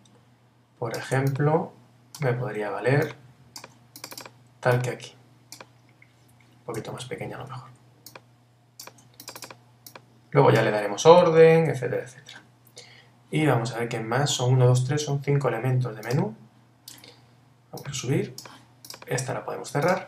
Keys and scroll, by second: 7.0 super+t.